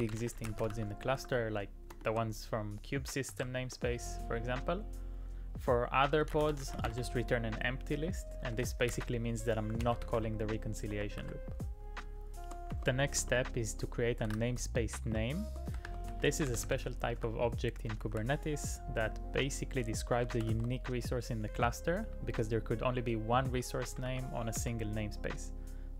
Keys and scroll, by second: 0.0-1.7 typing, 3.3 shift+[, 3.6 Return, 6.0-12.7 typing, 13.2 Return, 14.2 shift+[, 14.3 shift+], 15.1 Return, 15.5-18.2 typing, 20.4 shift+w, 20.5 shift+w, 22.0 j, 23.5-24.6 typing.